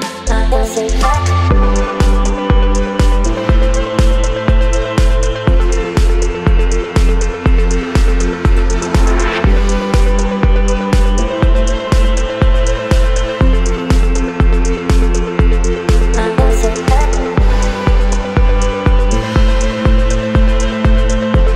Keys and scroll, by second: 5.6 Return, 7.1 space, 10.2 Down, 14.0 Up, 18.1 Up, 19.3 Up, 19.9 space, 21.3 space.